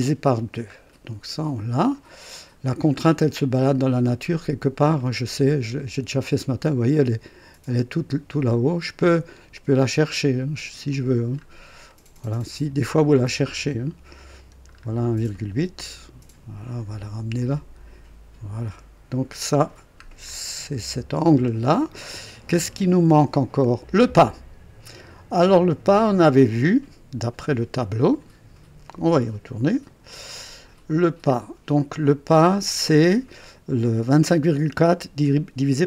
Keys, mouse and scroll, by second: 0.7 scroll up 1, 1.1-1.4 scroll down 1, 2.9 scroll down 1, 3.6-4.3 scroll down 2, 5.0-6.7 right drag, 8.4 click, 9.8-11.0 drag, 11.4-11.7 scroll up 1, 11.9 right click, 12.6-13.0 scroll up 1, 13.1 right click, 14.7 scroll up 1, 15.3 right click, 17.3-19.2 drag, 20.0-20.3 scroll up 1, 20.6 right click, 21.2 scroll down 1, 21.6 scroll up 1, 26.4 click, 27.7 click, 29.8 click, 30.9 scroll down 2, 32.0 scroll up 2.